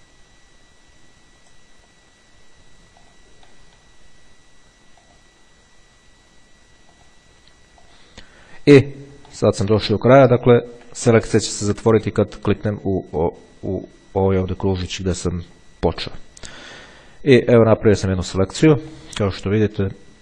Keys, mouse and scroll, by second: 2.1 click, 3.2 click, 5.2 click, 7.2 click, 8.0 click, 9.6 middle click, 10.4-11.0 ctrl+scroll up 2, 16.2 click, 17.2-18.8 ctrl+scroll down 1, 19.2 ctrl+click, 20.0-20.2 ctrl+scroll down 2.